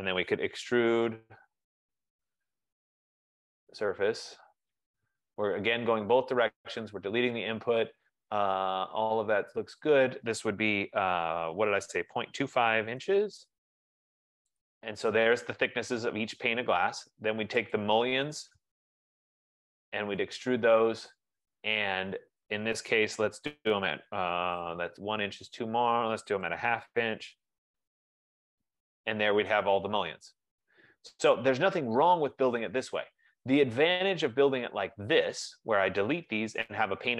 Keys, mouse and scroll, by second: 0.3-2.0 typing, 3.5-4.9 typing, 9.0 typing, 12.2-13.5 typing, 15.0 click, 16.5-18.0 scroll, 18.3 click, 18.7-20.4 typing, 24.4-28.2 typing, 29.3 click, 29.9 scroll, 31.3-32.0 scroll, 33.5-34.3 scroll, 35.0-35.5 scroll, 35.5-35.9 scroll, 36.9 scroll, 37.0 click.